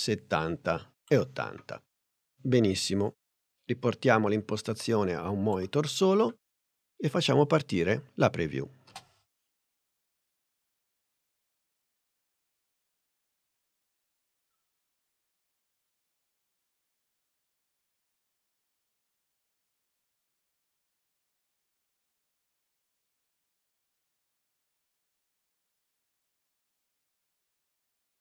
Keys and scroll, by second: 9.0 space.